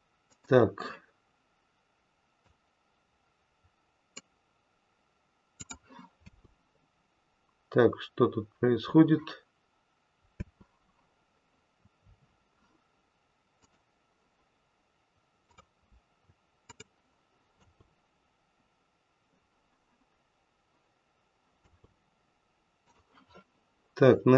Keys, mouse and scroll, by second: 0.2 click, 2.4 click, 5.5 click, 6.1 space, 10.3 space, 13.5 click, 15.4 click, 16.6 click, 17.6 space, 21.5 space, 22.8 click.